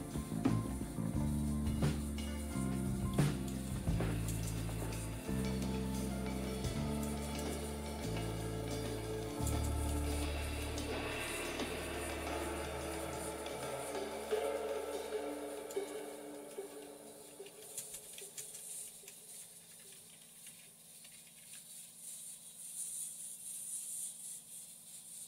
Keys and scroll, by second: 0.0-11.6 typing, 12.7-20.2 typing.